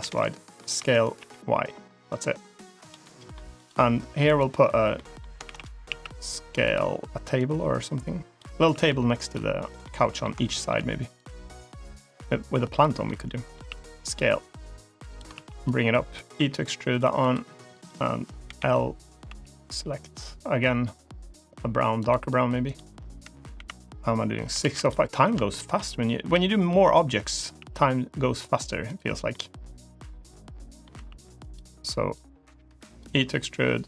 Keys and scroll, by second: 0.6 s, 4.1 3, 5.3 shift+d, 5.7 s, 8.4 s, 13.5 s, 15.2 ctrl+z, 16.2 e, 18.3 l, 19.1 g, 23.4 KP_7, 24.5 shift+d, 26.2 s, 27.4 g, 30.8 s, 33.0 e.